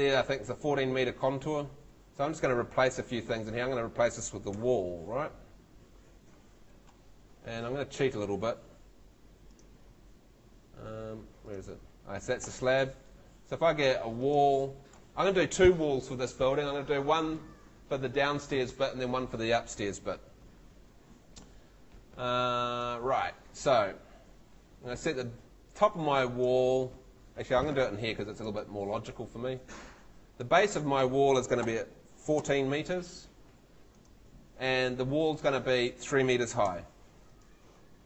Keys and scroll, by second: 1.9 Escape, 4.6 F2, 6.6 Escape, 12.5 Escape, 32.4 4, 36.6 3.